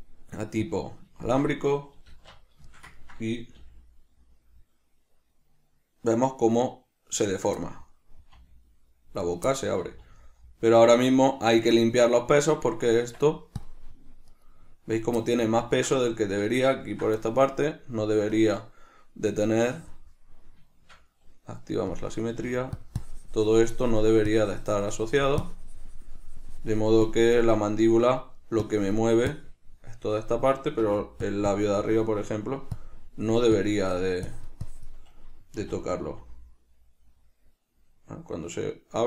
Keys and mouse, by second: 0.0-1.6 drag, 1.6-7.6 shift+middle drag, 2.4 alt+q, 4.0 r, 7.6 right click, 7.9-9.6 middle drag, 8.6 r, 9.6 right click, 9.8-12.0 middle drag, 10.1 r, 12.0 right click, 12.8 right click, 13.3 Tab, 14.6 right click, 15.5-18.3 ctrl+middle drag, 18.3 click, 18.6 click, 19.7-21.0 drag, 21.0-22.2 shift+middle drag, 22.2 click, 22.7 f, 23.3-28.0 drag, 28.0 middle click, 28.9-30.6 drag, 30.6 middle click, 31.1 f, 31.8-39.0 drag, 35.8 r.